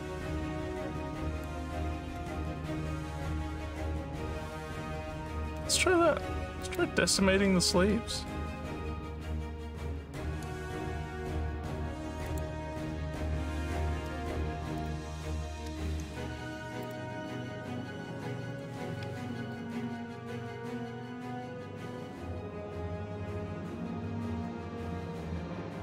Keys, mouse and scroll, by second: 1.9 alt+middle click, 6.7 click, 12.3 click, 14.8 click, 15.9 s, 16.9 click, 18.5 click, 25.2-25.8 alt+drag.